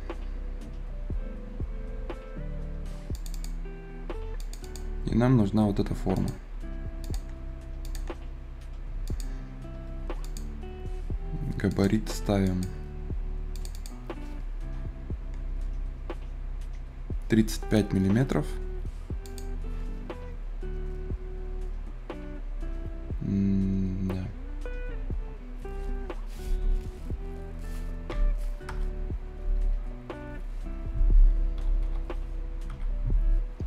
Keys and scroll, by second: 27.9 `, 28.5 Return, 31.4 c, 31.7 e, 32.5 Return.